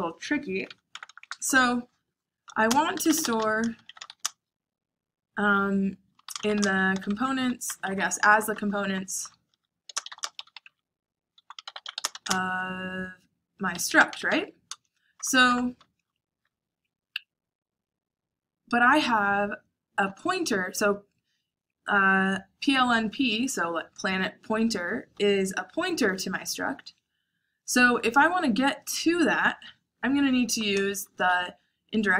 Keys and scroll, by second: 0.8 Tab, 1.0 Tab, 1.1 Tab, 2.3-4.6 typing, 5.9-7.8 typing, 8.9-15.4 typing, 29.2 shift+9, 30.4 BackSpace, 30.9 shift+8.